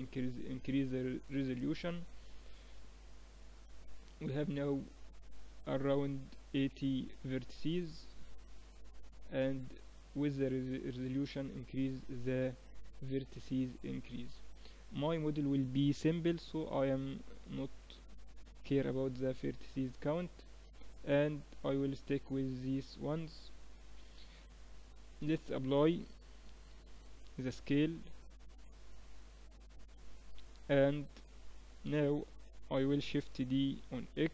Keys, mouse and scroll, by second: 2.4 click, 8.3-10.1 drag, 11.2-13.0 drag, 17.4-19.9 drag, 20.9-24.8 middle drag, 23.6 KP_1, 27.2 ctrl+a, 30.7 Tab, 31.4 Tab, 33.2 shift+d.